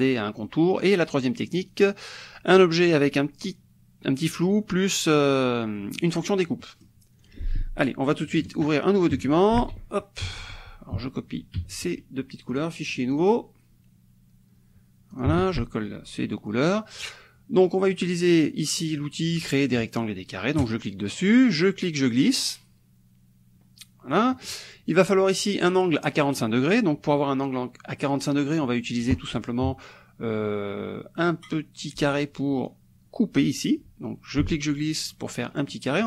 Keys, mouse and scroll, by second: 0.5 middle click, 1.7 click, 6.0 middle click, 6.6 middle click, 7.3 click, 8.5 shift+click, 9.6 ctrl+v, 10.4 ctrl+z, 11.6 ctrl+c, 12.6 click, 13.2 click, 15.2 ctrl+click, 15.4 ctrl+v, 16.3 click, 20.6 click, 21.6-24.7 drag, 34.4-36.0 ctrl+drag.